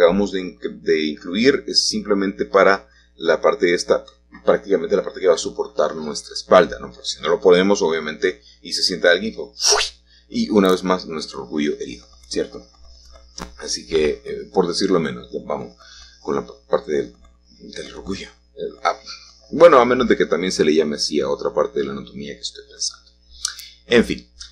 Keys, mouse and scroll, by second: 1.2-4.6 drag, 7.4-9.7 shift+drag, 9.7-10.5 scroll up 1, 11.3-12.7 middle drag, 15.8 s, 16.3 0, 16.5 Return, 18.5 g, 23.2 g.